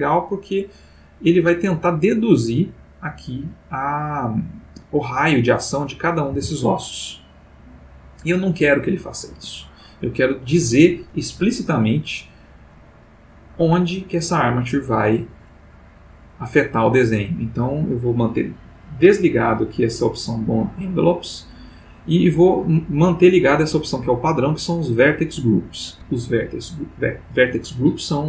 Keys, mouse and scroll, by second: 4.6 Escape, 5.9 click, 6.3 r, 9.3 Escape, 12.7 click, 18.4 click.